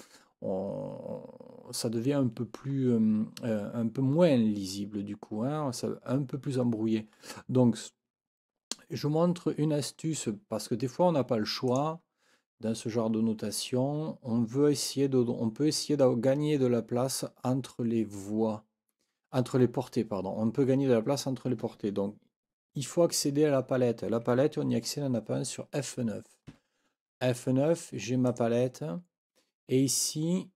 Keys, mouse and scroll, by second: 11.7 click, 26.5 F9, 28.3 click.